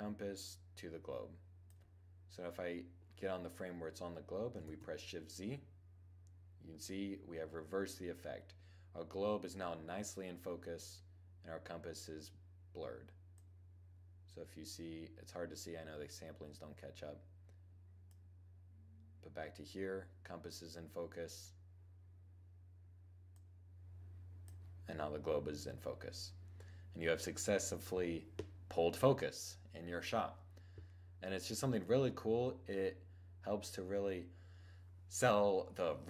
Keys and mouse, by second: 4.2 shift+z, 12.8-14.7 drag, 22.8-24.7 drag.